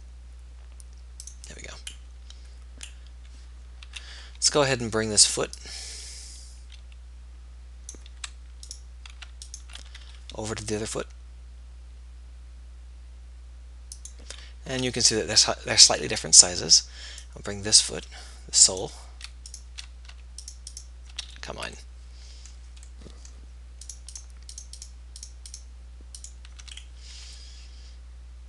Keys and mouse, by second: 4.2 a, 10.4 g, 15.0 a, 19.8 b, 27.8 g.